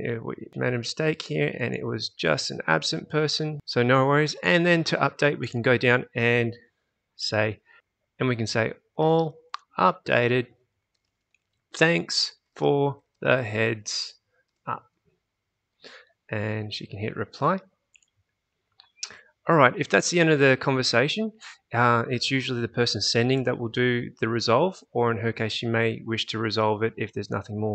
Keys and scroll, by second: 7.5-15.0 typing.